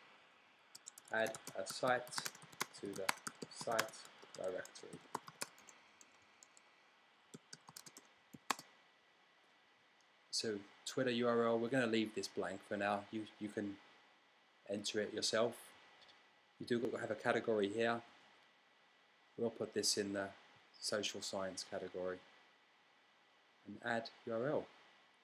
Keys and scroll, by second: 0.0-8.8 typing.